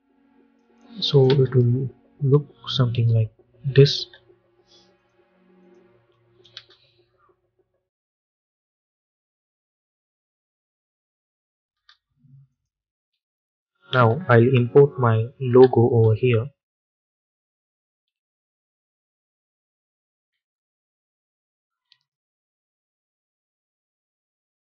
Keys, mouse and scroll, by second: 1.2 space, 3.8 space, 4.8 click, 6.4 space, 11.6 space, 12.4 click, 12.9 u, 15.3 ctrl+i, 16.9 click, 18.0 n, 18.9-19.4 scroll down 1, 21.0 click.